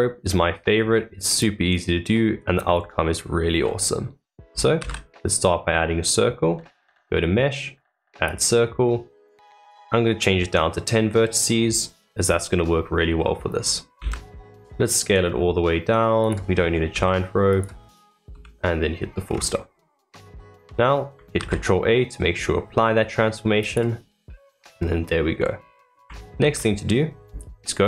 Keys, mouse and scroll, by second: 0.7-1.2 scroll up 1, 1.2-3.0 middle drag, 3.0-3.5 scroll up 1, 3.5-4.7 middle drag, 4.7 shift+a, 8.8-11.5 middle drag, 11.5-12.7 scroll down 2, 12.7-13.2 scroll down 2, 13.2-13.9 middle drag, 13.9 s, 16.4 scroll up 3, 16.9 s, 18.3 KP_Decimal, 19.2-19.7 scroll down 7, 20.0-21.3 middle drag, 21.3 ctrl+a, 24.0-24.7 middle drag, 24.7 scroll down 3, 25.3-26.3 middle drag, 26.3 shift+a.